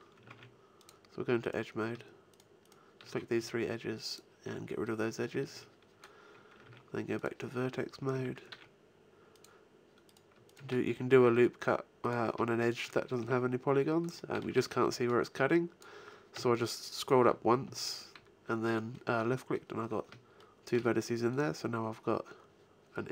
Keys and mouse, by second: 0.2 ctrl+Tab, 3.3 x, 5.0 middle click, 6.6 ctrl+Tab, 7.7 a, 8.1 a, 8.4 ctrl+r, 9.5-11.2 drag, 10.9 f, 12.9 f, 13.2 a, 14.8 b, 16.3 g, 17.2 f, 17.4-18.9 drag, 17.6 a.